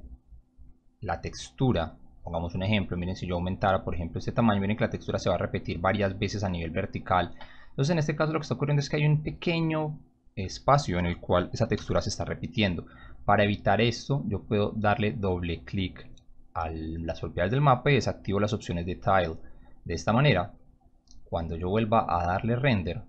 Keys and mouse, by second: 0.1 click, 3.6-6.0 drag, 7.3 ctrl+z, 9.0 click, 9.5 click, 11.7 m, 13.8 click, 14.0 click, 14.9 click, 15.4 click, 15.7 click, 17.9 click, 18.5 click, 20.8 click, 22.3 click.